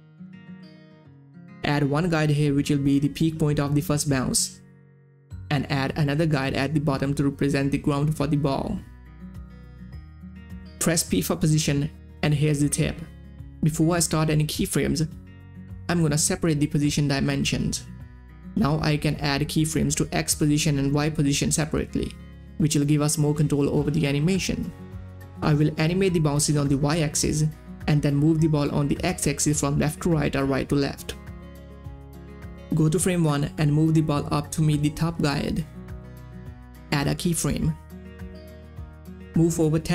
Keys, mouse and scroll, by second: 0.2-8.9 drag, 9.3 v, 9.5 click, 11.6 middle click, 11.6 click, 12.3 p, 13.7 right click, 17.3 right click, 17.3 click, 33.7-36.2 drag, 36.2-37.9 drag, 39.1 shift+Page_Down.